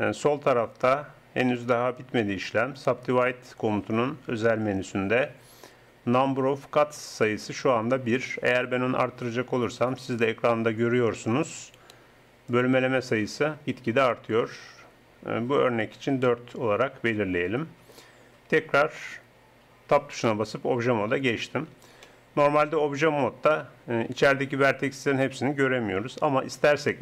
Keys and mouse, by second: 8.5-12.0 drag, 12.7-14.5 drag, 16.3 click, 16.5 middle click, 19.8 middle click, 20.3 Tab.